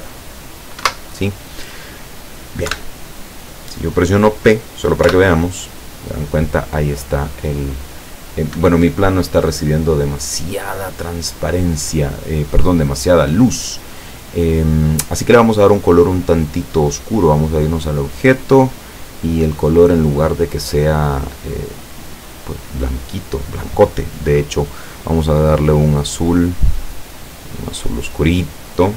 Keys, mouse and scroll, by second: 0.9 Escape, 2.8 KP_7, 5.1 p, 8.6 Escape, 17.3 click, 18.0-19.0 scroll down 5, 19.4 click, 25.2-26.4 drag, 27.2-28.4 drag.